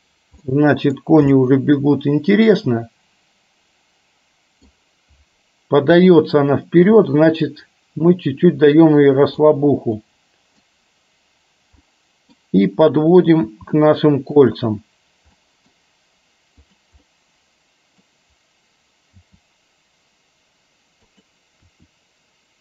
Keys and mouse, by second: 0.5-1.1 middle drag, 1.5-4.8 middle drag, 7.0 g, 10.0-10.7 middle drag, 11.8-12.3 middle drag, 13.5 g, 15.5 middle drag, 16.7 drag, 17.2-18.2 middle drag, 19.2 g, 21.6 r.